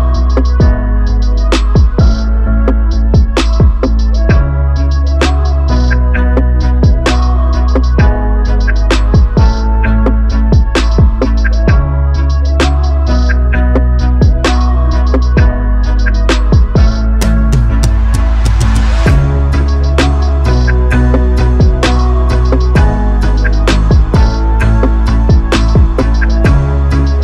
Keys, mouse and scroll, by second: 4.2 KP_0, 6.4 KP_0, 8.5 KP_0, 15.0-16.1 drag, 16.1 KP_0, 17.5 middle click, 18.5 middle click, 20.5-22.7 middle drag, 26.3 middle click.